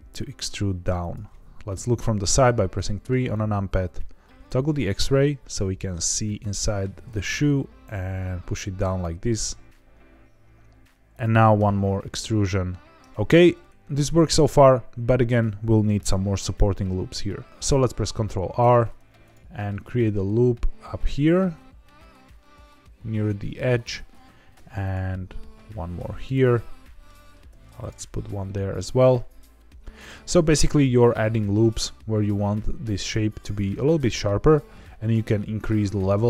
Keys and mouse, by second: 0.9 click, 1.7 KP_3, 2.8 shift+middle click, 3.3 z, 6.5 g, 7.0 z, 11.1 click, 11.5 e, 13.1 z, 18.5 ctrl+r, 23.7 click, 24.5 ctrl+r, 26.2 click, 26.5 middle click, 27.4 ctrl+r, 29.9 click, 30.2 middle click, 33.0 middle click.